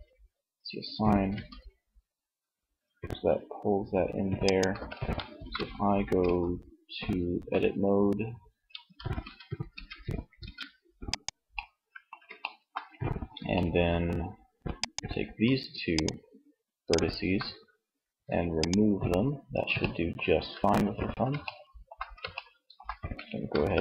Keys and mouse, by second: 0.4 r, 3.9 ctrl+z, 4.4 ctrl+Tab, 5.4 Tab, 8.0 Tab, 8.8 Tab, 9.5 ctrl+Tab, 18.6 Tab, 22.8 ctrl+s.